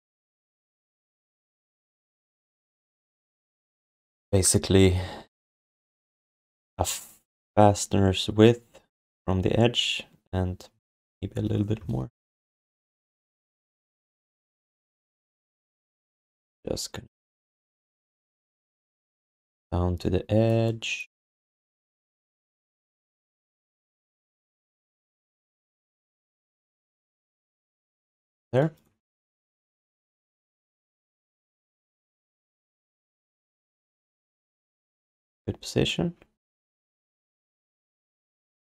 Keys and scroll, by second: 12.6 space, 13.9 space, 14.6 space, 21.7 e, 24.2 w, 35.0 e.